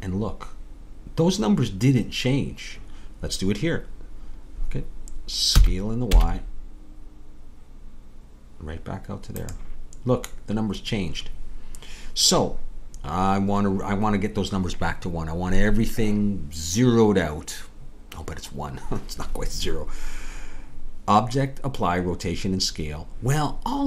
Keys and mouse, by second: 5.5 s.